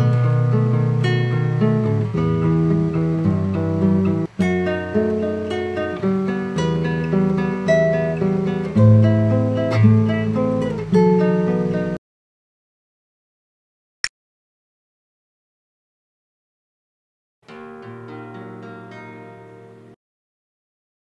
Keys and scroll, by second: 0.0 super+j.